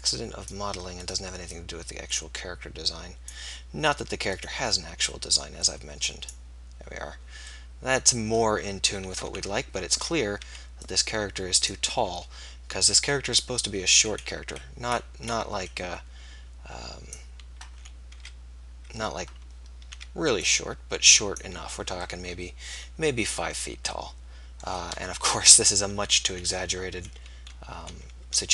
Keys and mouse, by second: 1.5-3.4 middle drag, 5.2-6.3 middle drag, 9.4 a, 10.1 z, 10.7 b, 18.3 z, 19.9 z, 21.7 z, 25.3 KP_3, 27.8 s.